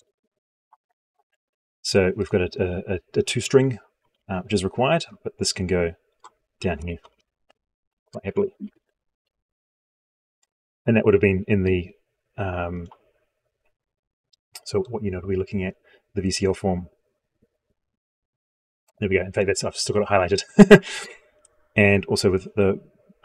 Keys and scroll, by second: 3.9 ctrl+Home, 7.0 ctrl+v.